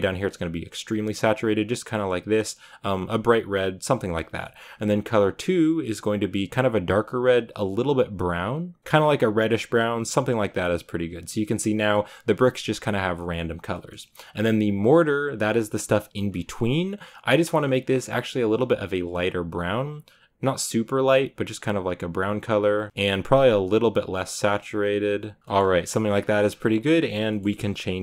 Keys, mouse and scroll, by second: 6.0 click, 10.8 click, 15.3-16.1 scroll up 4, 16.1 scroll down 4, 17.9 click, 23.6 click.